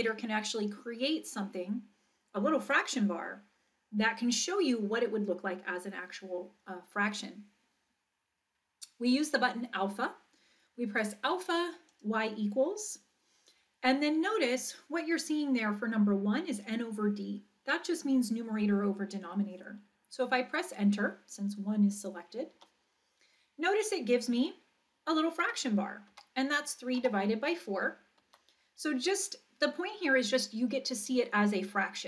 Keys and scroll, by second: 22.5 Return, 25.4 3, 26.1 Down, 27.0 4, 28.3 Right.